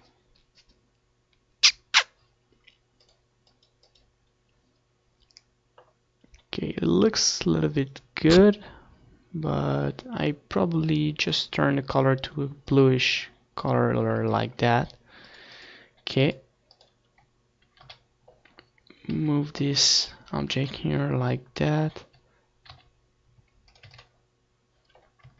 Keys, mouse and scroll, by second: 0.9-2.6 drag, 9.2-10.9 drag, 12.1 ctrl+s, 13.2-15.9 drag, 15.8 KP_1, 17.1 r, 18.1-19.7 drag, 18.5 KP_0, 19.5 KP_1, 20.6 g, 21.7-23.3 drag, 21.7 ctrl+s, 23.1 KP_0, 24.8-25.3 drag.